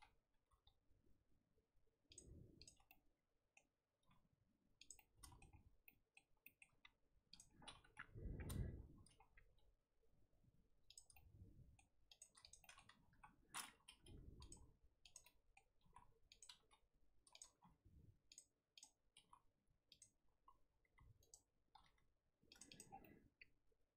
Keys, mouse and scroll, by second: 0.5 g, 2.5 click, 2.8-4.0 middle drag, 4.0 r, 4.9-5.6 middle drag, 5.6 scroll down 2, 5.8-6.7 middle drag, 6.7-7.3 scroll up 3, 7.3 click, 7.6-7.9 scroll down 3, 7.9 KP_7, 8.3 scroll up 1, 8.4-9.2 scroll down 1, 9.2 scroll up 1, 9.4 g, 11.1-12.1 middle drag, 12.1 click, 12.4 click, 12.6-13.0 middle drag, 13.0 KP_1, 13.3 right drag, 13.5-13.8 scroll up 2, 13.8 r, 14.5 s, 15.2-15.8 middle drag, 15.8 r, 16.5 g, 17.5 r, 17.7 right click, 18.7 click, 19.1 r, 20.1 r, 21.7 g, 22.7 click, 22.8 scroll down 1, 23.0-23.9 middle drag.